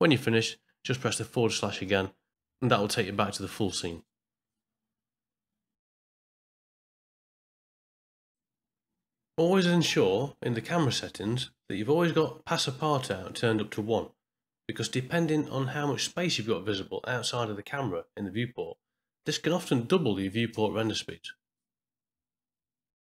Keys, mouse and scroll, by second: 10.2 click, 11.3 click, 11.9 click, 12.4 click, 13.8-16.0 drag, 15.0 middle click, 18.6-21.1 drag.